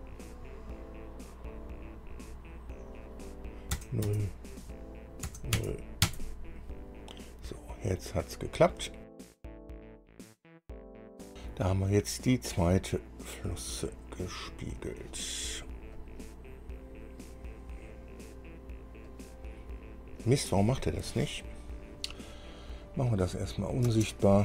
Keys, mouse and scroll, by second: 4.0 KP_0, 4.3 KP_Enter, 5.5 KP_0, 5.8 KP_Enter, 6.5 KP_Enter, 9.5 click, 9.8 click, 10.1-10.7 typing, 10.9 KP_Enter, 11.4 click, 13.7 click, 16.2 click, 16.7-17.0 scroll down 1, 19.3 click, 21.5 scroll up 1, 22.0 scroll down 1, 23.1 click, 24.1 space.